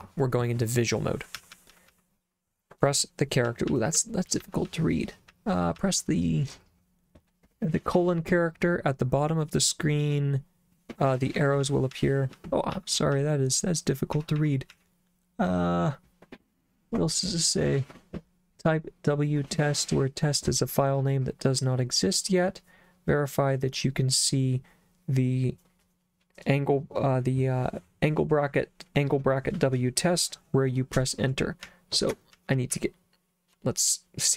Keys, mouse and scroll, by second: 1.4 j, 1.5 j, 1.7 j, 1.9 j, 3.5-5.8 typing, 11.6-14.7 typing, 31.6 k, 32.4 j, 32.7 k.